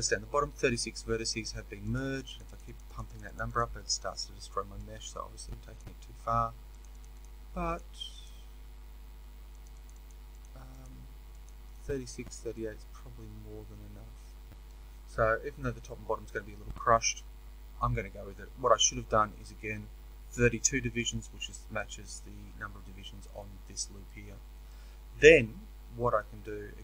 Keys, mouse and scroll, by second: 12.4-26.8 middle drag.